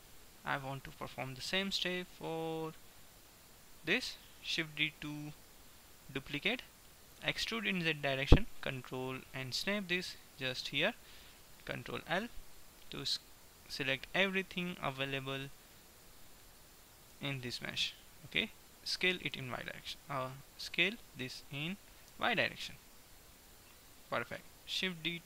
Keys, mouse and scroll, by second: 0.2-1.2 middle drag, 2.5-4.3 middle drag, 4.7 shift+d, 7.3 e, 10.3 middle click, 10.8-12.7 drag, 12.2 ctrl+l, 15.5-17.2 drag, 17.3 g, 19.2 s, 19.5 y, 20.7 s, 24.8-25.2 drag.